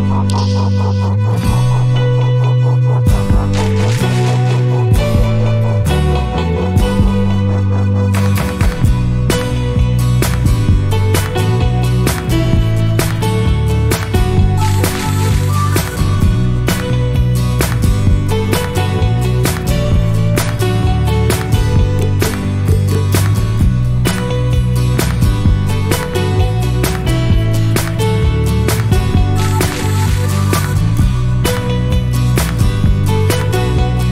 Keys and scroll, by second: 8.7-9.9 typing, 31.9 typing, 33.0 typing.